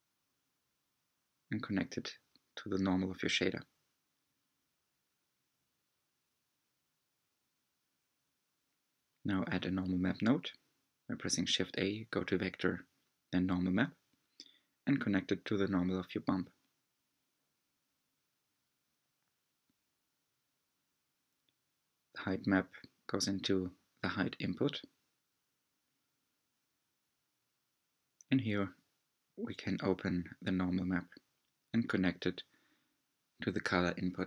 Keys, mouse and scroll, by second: 2.7 click, 4.3-5.8 scroll down 5, 6.0 click, 6.9 g, 7.4 click, 7.9 g, 17.5 click, 18.6 shift+middle click, 19.7 shift+middle click, 21.9-22.6 drag, 22.7 click, 25.9 click, 28.5-29.4 shift+middle drag, 29.4 click, 32.6-34.2 shift+middle drag.